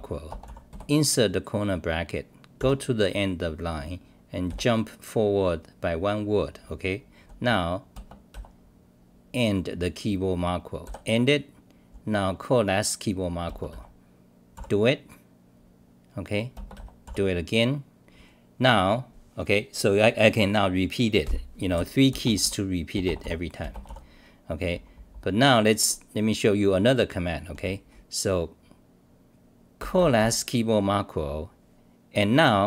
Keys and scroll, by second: 2.6 s, 4.5 v, 14.3-15.0 typing, 17.0 s, 22.2-24.7 typing, 26.4 scroll down 1, 29.9-30.7 typing.